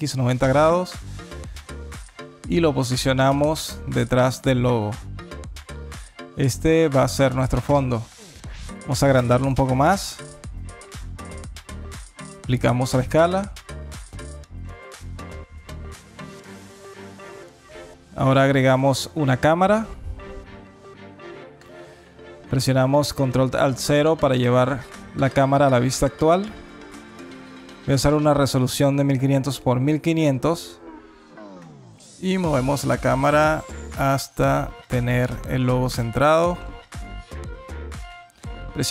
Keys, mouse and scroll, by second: 0.3 alt+click, 0.6 scroll up 1, 1.1 alt+click, 1.8 g, 4.9 alt+click, 6.3 alt+middle click, 6.8 alt+click, 7.4 scroll down 1, 7.8 alt+middle click, 8.4-9.0 scroll down 3, 9.1 s, 10.8 ctrl+a, 12.3 alt+click, 12.8-13.5 scroll up 5, 13.6 alt+click, 14.1 alt+middle click, 14.6 scroll up 1, 14.9 alt+click, 16.6 alt+middle click, 17.5 shift+a, 20.9 click, 23.4 ctrl+alt+KP_0, 26.0 click, 27.6 KP_0, 28.7 KP_0, 32.9 g, 38.8 n.